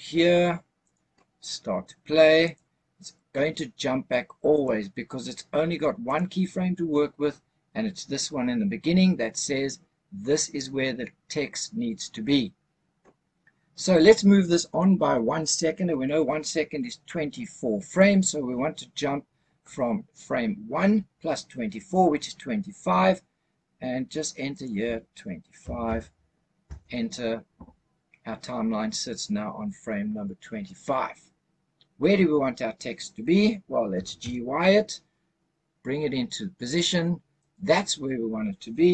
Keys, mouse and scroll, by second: 0.8 click, 2.3 click, 4.4 click, 5.9 click, 24.4-26.7 drag, 33.8 g, 34.2 y, 37.3 click.